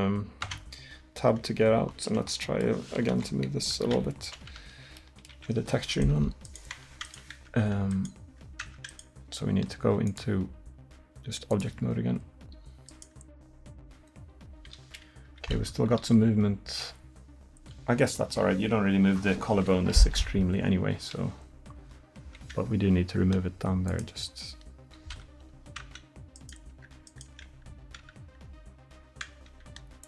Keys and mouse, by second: 0.5 Tab, 3.2 KP_1, 6.8 Tab, 7.5 Tab, 8.7 Tab, 11.7 Tab, 13.8 r, 16.1 r, 20.3 r, 23.9-25.9 drag, 25.9 Tab, 26.4-27.3 drag, 26.8 Tab, 27.3 Tab, 28.1 Tab, 29.3 Tab.